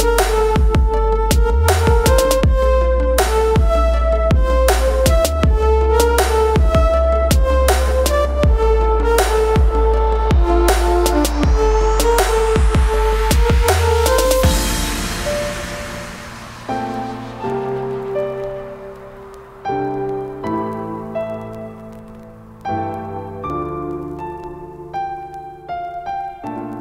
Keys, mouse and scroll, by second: 1.6 space, 2.0 click, 3.9 scroll up 1, 4.1 click, 6.6 scroll up 1, 6.8 click, 7.2 scroll down 1, 7.4 click, 8.0 space, 8.1 click, 8.2 space, 8.8 click, 14.2 ctrl+space, 14.3-14.7 ctrl+click, 14.6 ctrl+space, 15.1 click, 15.3 space, 15.6-16.3 ctrl+click, 15.9 ctrl+space, 17.5 right click, 18.7 click, 20.0 typing, 21.1 ctrl+j, 23.0 click, 24.0 ctrl+space, 24.0 typing, 24.2 ctrl+click, 24.4-24.7 ctrl+space, 25.1-25.6 click, 25.4 space, 25.9-26.7 ctrl+click, 26.1 ctrl+space, 26.6-26.8 click.